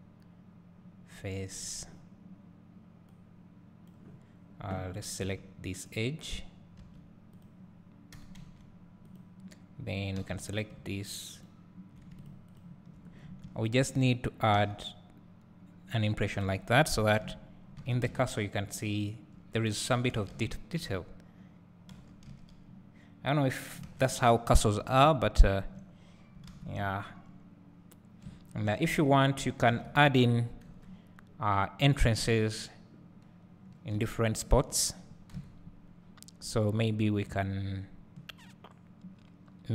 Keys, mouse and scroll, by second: 1.8 x, 5.9 click, 6.8 2, 7.5 click, 8.2 g, 9.1-10.2 drag, 10.2 3, 11.5 ctrl+click, 13.2 scroll up 1, 13.4 `, 14.6 e, 16.3 click, 16.5 Tab, 17.2 KP_Divide, 17.8 alt+a, 19.9-21.0 scroll up 1, 21.0 click, 22.0 g, 24.0 alt+a, 25.1 `, 26.2-26.9 scroll up 2, 26.9 `, 29.0 Tab, 29.6 scroll down 1, 29.7 alt+a, 30.7 KP_7, 34.0 `, 35.4 KP_7, 36.1-39.7 scroll up 1.